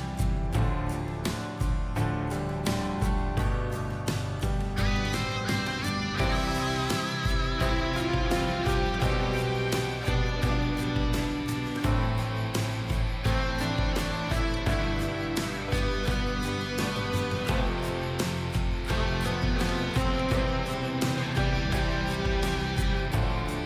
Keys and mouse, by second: 5.1 middle click, 7.8-8.1 drag, 8.6-9.2 drag, 11.2 click, 12.3 click, 14.2 r, 16.1 click, 20.0 click, 20.3 click, 20.5 click, 20.8 click, 21.3 click, 21.9 r, 23.3 r.